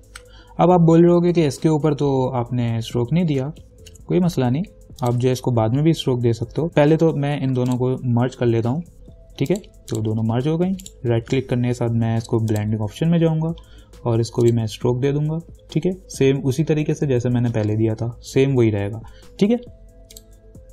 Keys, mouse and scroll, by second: 5.2 click, 7.9 ctrl+click, 8.8 ctrl+e, 9.7 click, 11.0 right click, 12.7 click, 14.7 click, 20.4 click.